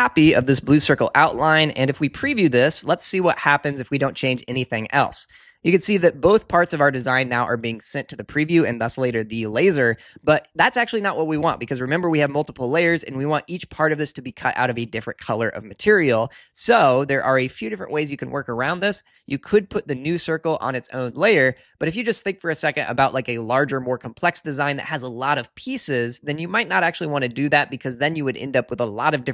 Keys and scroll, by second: 0.2 super+c, 0.6 super+v.